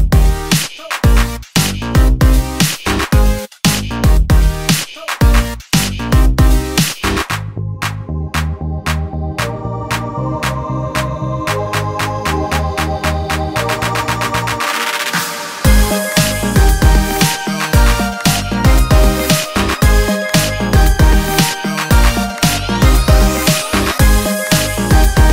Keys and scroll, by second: 12.3 super+d.